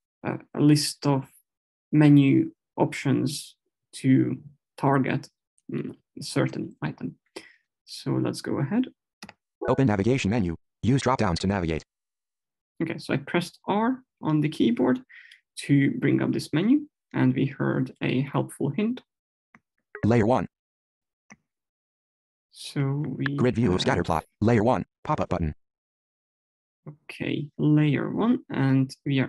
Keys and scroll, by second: 9.4 r.